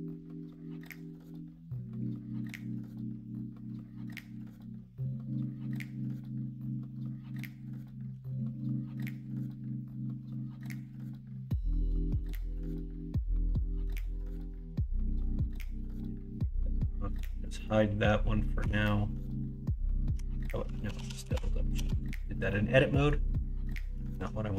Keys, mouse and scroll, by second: 0.9 s, 2.3 g, 5.9-7.4 middle drag, 8.1 s, 11.4-12.3 scroll up 1, 12.7 scroll up 1, 12.9-13.6 scroll down 1, 13.6 middle click, 13.9 scroll down 1, 14.1 middle click, 15.3 shift+d, 17.2 h, 18.6 Tab, 20.1 Tab, 20.7 ctrl+z, 22.3 middle click, 22.9 middle click.